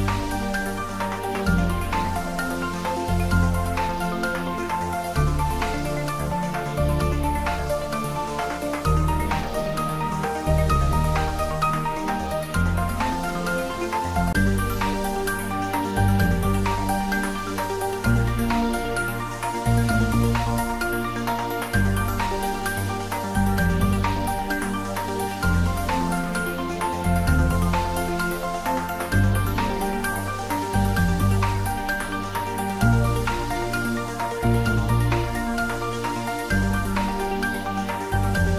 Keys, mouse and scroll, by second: 10.2 click, 14.7 click, 25.5-27.3 scroll up 1, 27.7 click, 28.4-31.9 right drag, 35.9-38.4 scroll down 1.